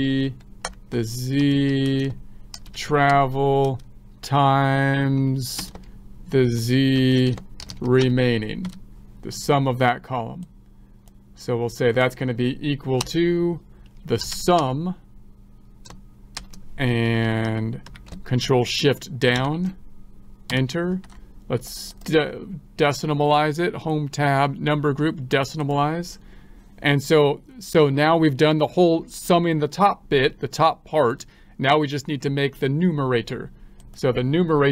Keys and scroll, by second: 19.7 ctrl+shift+Down.